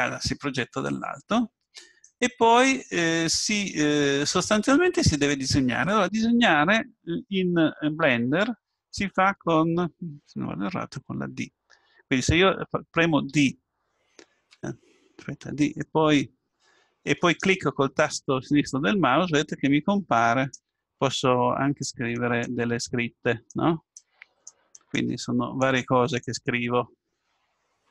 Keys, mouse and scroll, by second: 2.0-3.9 drag, 13.3 d, 13.8-14.7 d, 15.4 d, 15.8-17.7 drag, 20.7-27.9 d, 21.2-27.5 drag.